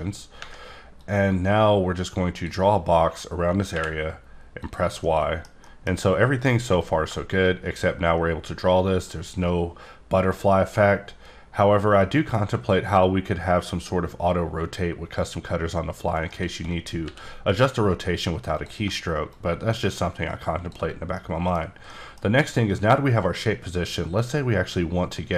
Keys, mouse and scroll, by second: 0.9 click, 3.7 y, 4.6 click, 5.0 middle click, 6.8-16.0 drag, 16.2 shift+right click, 17.0 r, 18.5 click, 21.1 middle click, 21.9 middle click, 24.2-25.3 drag.